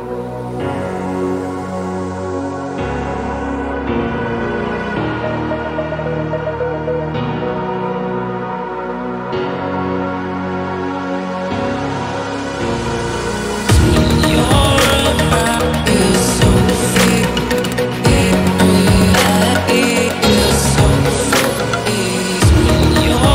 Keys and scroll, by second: 15.5 ctrl+t, 17.4 Return, 22.3-23.3 typing.